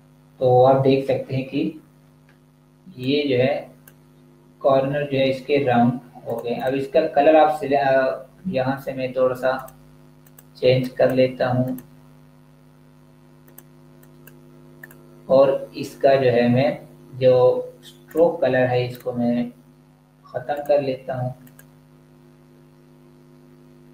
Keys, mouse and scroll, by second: 2.9 click, 6.1 click, 9.5 click, 17.8 click.